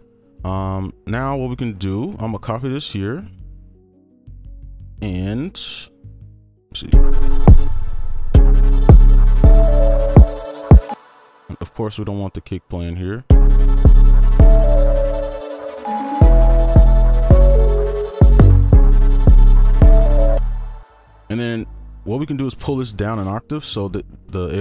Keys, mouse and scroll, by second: 2.0 right click, 4.5 scroll down 1, 5.9 scroll up 1, 6.2 right click, 7.6 space, 7.9 ctrl+a, 8.1 ctrl+a, 8.3 ctrl+Up, 8.9-9.9 scroll down 1, 9.9 right click, 12.8 double click, 13.0 right click, 13.7 space, 14.9 right click, 18.7 space, 19.2 right click, 20.0 double click, 20.7 space, 20.9 ctrl+click, 22.4 ctrl+Down, 23.1 right click, 23.8 ctrl+click, 24.3 Delete.